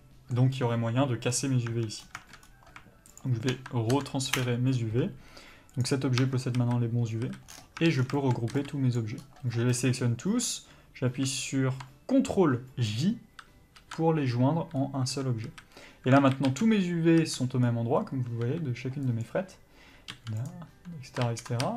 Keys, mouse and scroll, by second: 1.3-1.7 scroll down 1, 1.7 Tab, 2.0 scroll down 1, 2.4-3.1 scroll up 1, 3.1 shift+click, 5.8 click, 6.2 Tab, 6.5 a, 7.5-8.0 scroll down 2, 7.8 Tab, 8.1 shift+middle click, 8.9 b, 9.2-10.0 scroll up 1, 14.0 ctrl+j, 14.7-15.1 scroll up 1, 15.1 Tab, 15.4 a, 16.1 alt+a, 16.7-17.1 scroll up 1, 17.1 a, 19.0 s, 20.1 g, 21.2 ctrl+z, 21.6 a.